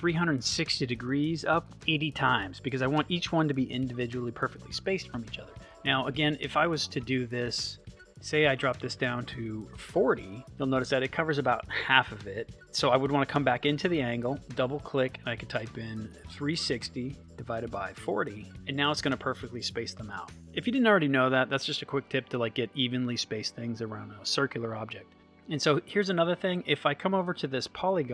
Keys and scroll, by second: 9.3 4, 16.1 3, 18.5 Return.